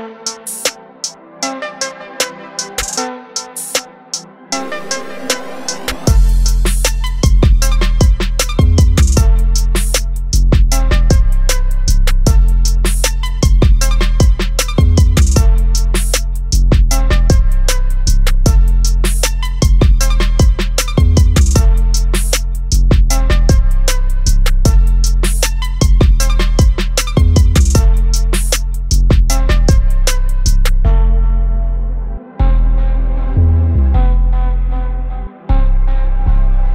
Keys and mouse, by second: 0.9 click, 5.6 click, 5.6 typing, 7.7 click, 7.7 typing, 9.9 click, 9.9 typing, 11.5-12.0 typing, 12.0 click, 19.6 click, 19.6 typing, 21.2 typing, 24.1 click, 24.1 typing, 30.3 click, 30.3 typing, 34.1 click, 34.1 typing.